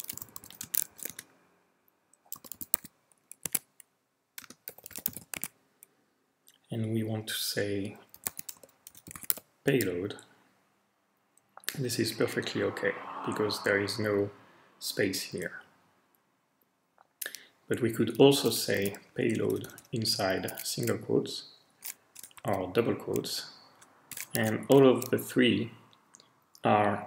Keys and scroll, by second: 0.0-3.2 typing, 3.4 Tab, 4.4-6.2 typing, 7.9-9.8 typing, 18.5-19.3 typing, 19.4 Left, 19.5 Left, 20.4 typing, 22.1-22.9 typing, 23.3-23.7 Right.